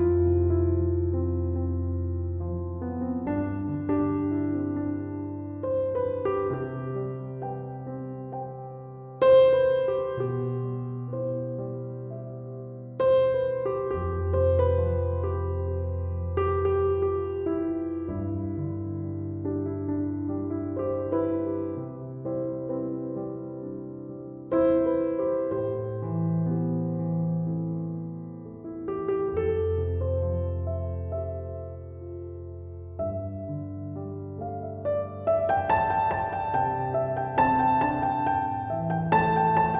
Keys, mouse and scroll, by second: 3.0 7, 4.5 ., 4.8 5, 5.2 Return, 6.9 Escape, 29.4 Escape, 30.8 Escape, 33.6 Return.